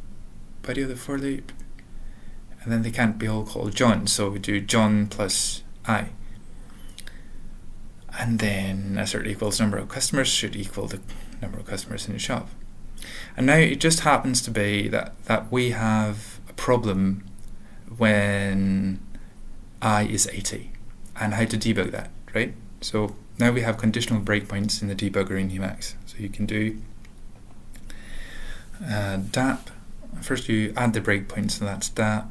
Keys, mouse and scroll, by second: 0.2 Return, 0.5 ctrl+a, 0.5 ctrl+n, 1.1 ctrl+n, 1.1 ctrl+e, 1.1 ctrl+p, 1.9 alt+b, 2.4 alt+f, 2.8 ctrl+p, 3.0 ctrl+b, 3.2 ctrl+b, 3.6-4.4 typing, 4.6 ctrl+a, 5.3 ctrl+s, 5.3 ctrl+n, 5.7 ctrl+n, 5.7 ctrl+k, 5.9 ctrl+k, 6.4 ctrl+/, 6.9 ctrl+n, 7.1 alt+f, 7.2 alt+f, 7.5 alt+f, 7.7 alt+b, 7.7 alt+d, 8.8 typing, 9.3 alt+/, 9.9 ctrl+a, 10.3 ctrl+s, 11.8 ctrl+p, 12.0 ctrl+p, 12.6 ctrl+n, 15.3 alt+shift+., 15.6 ctrl+p, 15.6 ctrl+k, 16.2 ctrl+s, 16.9 ctrl+k, 17.3 ctrl+s, 17.8 ctrl+p, 18.2 ctrl+p, 18.4 ctrl+k, 19.0 ctrl+s, 19.0 ctrl+p, 19.6 ctrl+p, 19.7 ctrl+p, 20.0 ctrl+n, 20.2 ctrl+n, 20.4 ctrl+p, 28.4 alt+x, 31.2-32.1 typing.